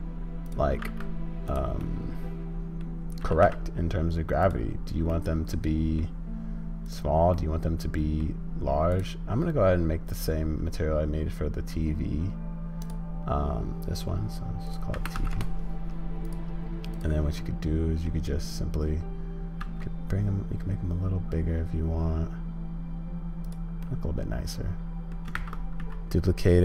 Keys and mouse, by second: 0.8 g, 1.9 middle click, 5.1 middle click, 6.2 middle click, 7.4 middle click, 8.9 click, 10.2 click, 14.7 click, 17.0 click, 17.4 middle click, 23.9-25.2 middle drag, 25.4 shift+d.